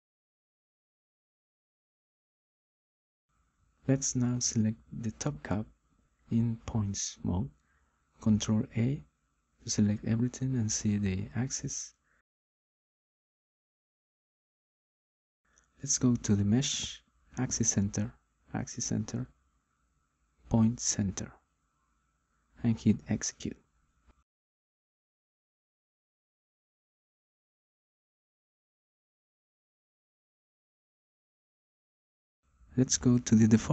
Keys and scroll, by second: 10.5 ctrl+a.